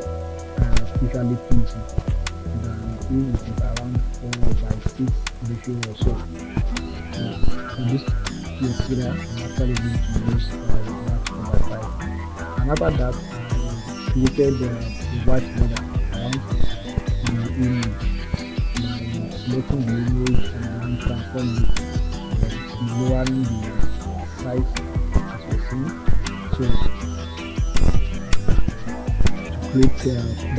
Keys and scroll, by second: 3.5 Return, 7.6 Return, 10.7 ctrl+a, 14.5 ctrl+t.